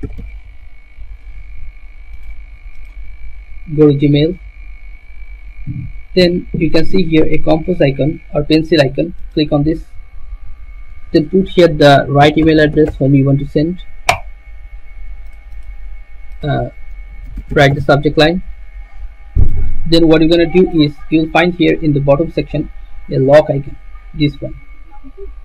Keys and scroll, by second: 0.0-0.4 typing, 12.2-13.3 typing, 17.2-19.0 typing.